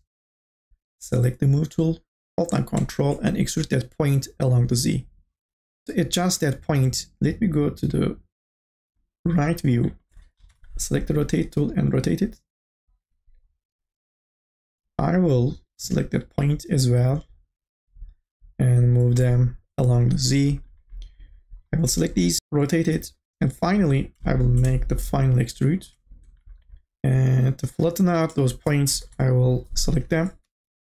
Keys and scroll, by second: 10.4 r, 12.9 e, 22.4 r, 22.8 e, 28.1 space, 29.0 KP_0, 30.4 t.